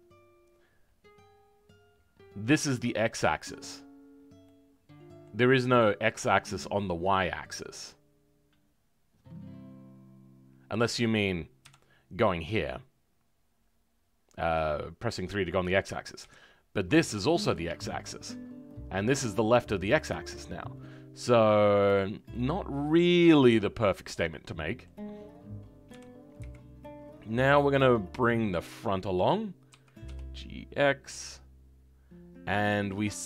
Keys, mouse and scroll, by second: 4.4-11.6 middle drag, 11.6 KP_3, 22.2-25.8 middle drag, 25.8 KP_3.